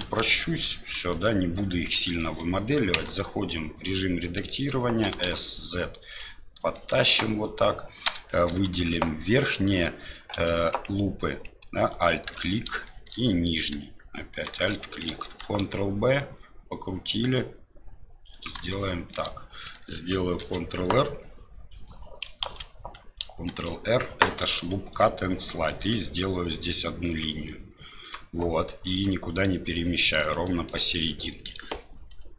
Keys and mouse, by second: 0.0 KP_3, 2.1 shift+middle click, 2.9 Tab, 4.4 middle click, 5.0 s, 6.8 middle click, 8.4 shift+middle click, 9.1 z, 10.3 z, 11.9 right click, 12.8 middle click, 14.3 alt+shift+click, 15.4 ctrl+b, 18.7 shift+click, 20.4 ctrl+t, 22.4 ctrl+z, 23.4 ctrl+r, 30.5 shift+click.